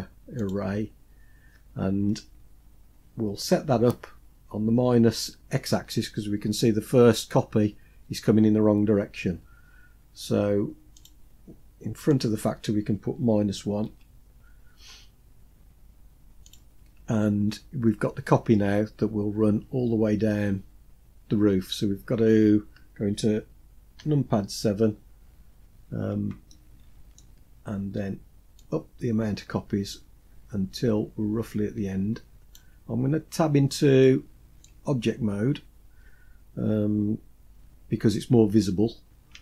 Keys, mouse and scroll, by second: 0.2 click, 10.7-16.2 drag, 19.2-19.9 scroll down 3, 19.9-20.7 scroll down 2, 20.7-21.3 scroll down 1, 21.6-22.4 scroll up 2, 23.7 KP_7, 24.9-26.1 scroll down 4, 26.2-26.9 shift+middle drag, 28.2-32.2 drag, 32.9-33.4 scroll up 4, 33.7 shift+middle click, 34.7-35.1 scroll up 2, 37.2 Tab, 38.7 scroll up 3, 39.3 shift+middle click.